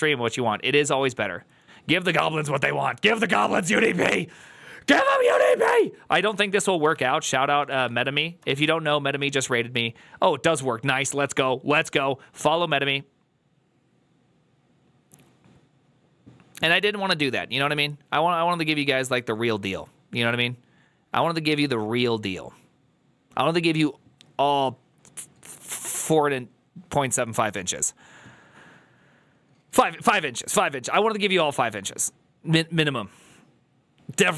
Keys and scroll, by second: 7.2-8.4 typing.